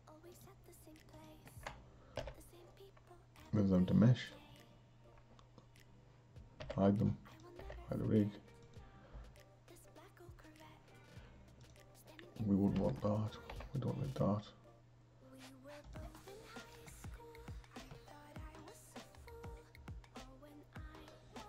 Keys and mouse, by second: 0.3 shift+click, 1.1 shift+click, 2.1 m, 6.6 h, 7.3 click, 7.6 h, 8.6 click, 11.6 click, 12.8 Delete, 13.2 click, 13.6 Delete, 15.8 click, 18.7 click.